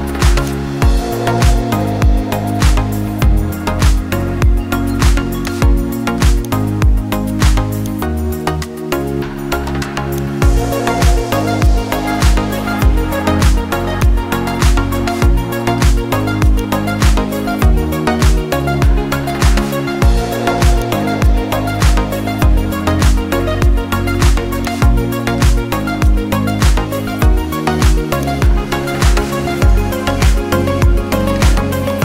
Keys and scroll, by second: 2.1 ctrl+i, 16.0-16.4 typing, 19.2-20.4 typing, 23.6-24.2 typing, 27.6 [.